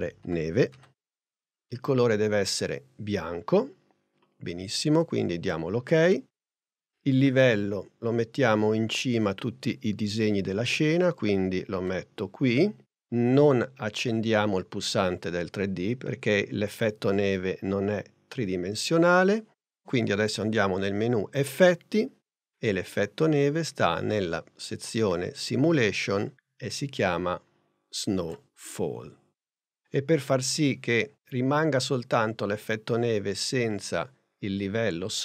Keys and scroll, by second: 0.0-1.1 typing.